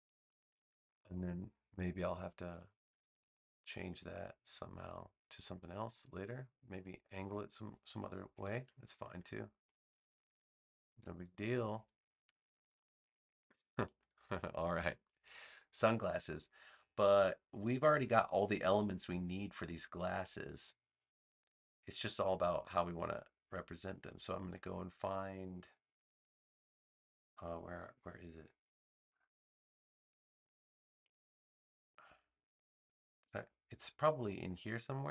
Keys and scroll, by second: 0.5 space, 6.0 space, 10.9 super+-, 12.1 space.